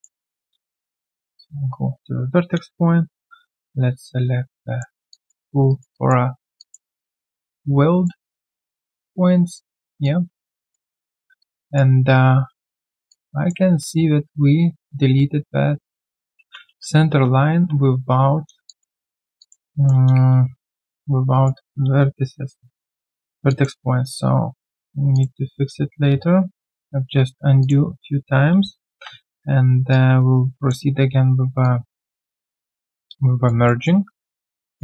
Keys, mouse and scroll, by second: 0.4 alt+click, 2.9 ctrl+shift+q, 5.1 alt+click, 5.7 alt+right click, 5.9 alt+click, 6.6 alt+click, 8.5 alt+right click, 8.8 alt+click, 9.7 alt+right click, 10.0 alt+click, 10.9 alt+middle click, 11.2 alt+right click, 11.4 alt+click, 13.1 alt+click, 16.1 ctrl+z, 16.3 ctrl+z, 18.6 alt+click, 19.4 alt+click, 19.7 alt+middle click, 21.3 alt+right click, 23.0 ctrl+shift+q, 23.5 alt+click, 25.5 right click, 28.9 ctrl+shift+q, 32.5 alt+right click, 32.8 alt+click, 33.6 alt+middle click, 33.9 alt+scroll down 1, 34.2 alt+middle click, 34.7 alt+click.